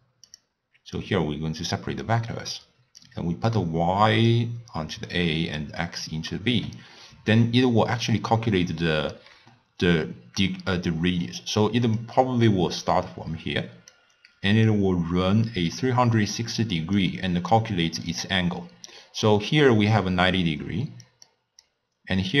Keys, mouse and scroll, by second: 1.0 drag, 2.1 click, 3.1-6.4 drag, 6.4-9.3 middle drag, 9.3-11.7 d, 12.0-14.0 drag, 14.0-14.6 d, 14.7-16.8 drag, 16.8-22.4 typing, 17.0-17.6 drag, 19.8 click, 20.4 click, 21.3 click.